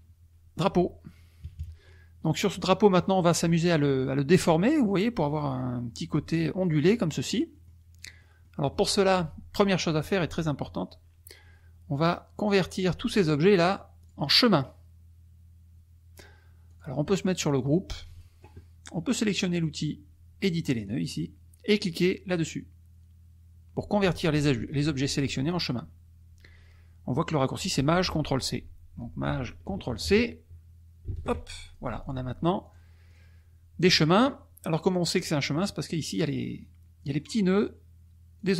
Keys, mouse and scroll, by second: 1.5 KP_Subtract, 2.1 click, 3.0 click, 6.9 click, 7.5 click, 8.1 click, 12.0 click, 13.2-14.4 drag, 16.7 click, 20.8 click, 31.1 ctrl+shift+c, 31.6 ctrl+shift+click, 32.0 ctrl+shift+click, 32.6 click, 33.0 click, 36.0 click, 37.1 click, 38.3 click.